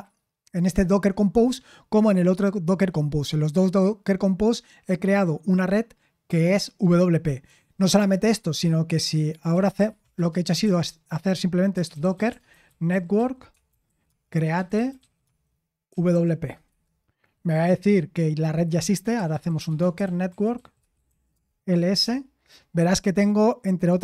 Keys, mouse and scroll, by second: 11.8-16.6 typing, 18.7-22.5 typing.